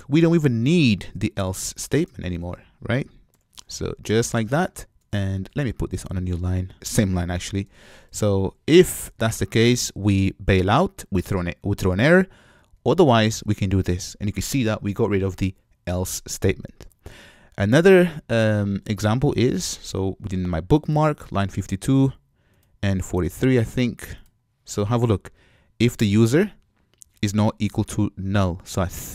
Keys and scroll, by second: 5.7 alt+BackSpace, 12.7 super+v, 16.8 super+v.